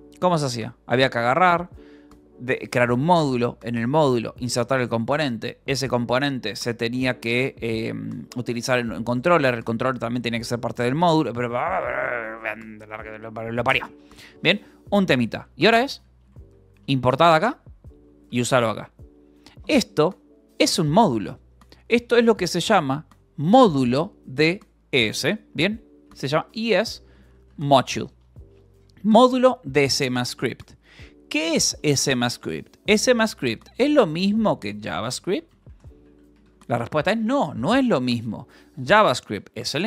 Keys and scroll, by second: 14.9-17.3 typing, 17.4 Escape, 18.7 shift+v, 19.3 Escape, 21.7 k, 23.2 shift+v, 23.5 Escape, 23.7 o, 25.5-28.1 typing, 33.0-36.9 typing, 38.2 Left, 39.4 Right.